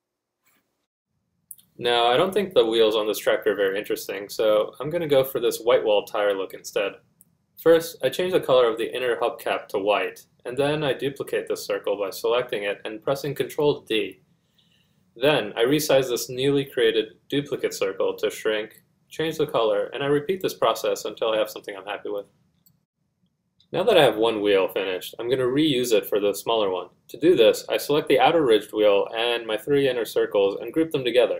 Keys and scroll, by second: 11.6-12.6 typing, 13.2 F1, 13.8 Caps_Lock, 16.3 Caps_Lock.